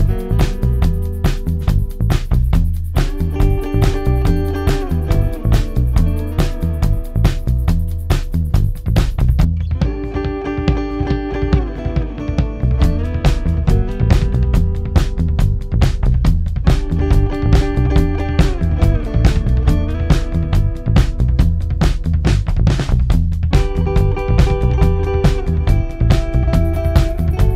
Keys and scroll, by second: 5.7 ., 11.6 3, 15.6 ctrl+d, 16.0 Escape, 17.3 Escape, 19.7 ], 20.1 Delete, 25.9 ], 27.1 ].